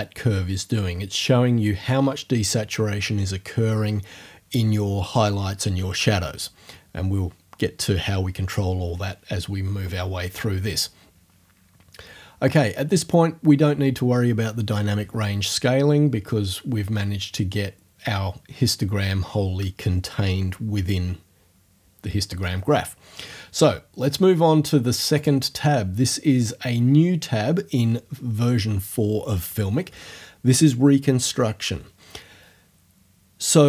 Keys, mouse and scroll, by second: 25.2 click.